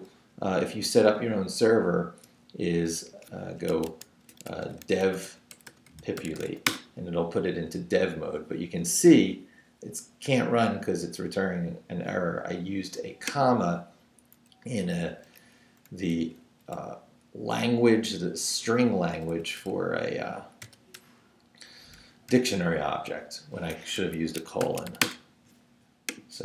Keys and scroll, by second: 3.5-6.9 typing, 15.2 Up, 16.1 Right, 16.4 Down, 16.7 Right, 19.1 Right, 20.6 i, 21.0 BackSpace, 22.0 shift+BackSpace, 22.3 shift+;, 24.0 ⟲, 24.6 shift+;, 24.9 shift+w, 25.0 Return.